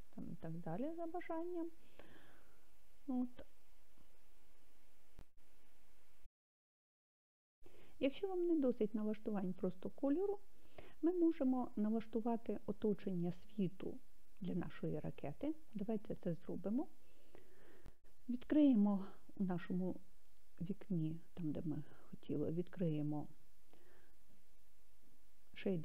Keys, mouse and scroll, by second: 17.3-19.1 drag, 23.0-25.8 drag.